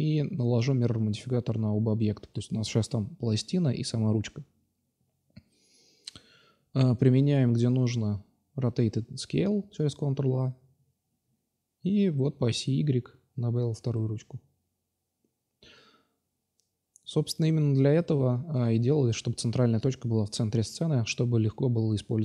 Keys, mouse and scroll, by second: 0.6-2.2 drag, 4.8 click, 5.8-6.8 drag, 7.9 ctrl+a, 9.4-10.8 middle drag, 11.0-11.8 middle drag, 13.6 middle click, 14.8 click, 15.1 Tab, 16.6 3, 17.1 shift+d, 17.8 p, 18.3 Tab, 19.0-19.4 drag, 19.4 Tab, 19.8-20.1 drag, 20.9-21.3 right drag, 21.3 s.